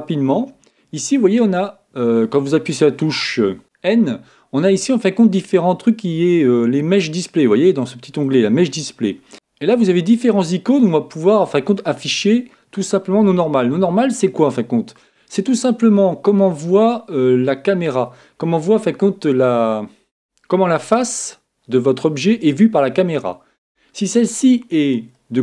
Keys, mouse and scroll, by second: 3.6 n, 7.8-9.3 drag, 11.9-13.7 drag, 13.2-15.1 middle drag, 16.7-18.9 middle drag, 16.7-17.3 scroll up 1, 18.9-19.2 scroll down 1, 25.1-25.4 middle drag.